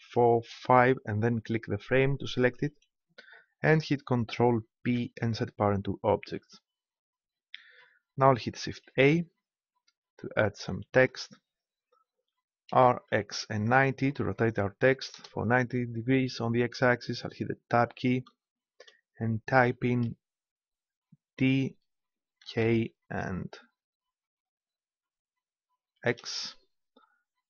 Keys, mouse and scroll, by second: 4.7 ctrl+p, 8.9 shift+a, 12.7 r, 17.7 Tab, 18.2 BackSpace, 22.4 shift+k, 25.7 shift+x.